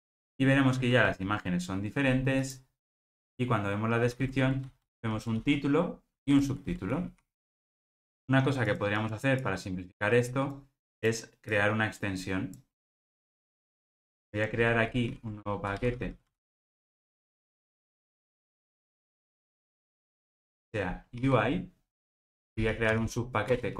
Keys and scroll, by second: 12.9 super+x, 15.1 super+n.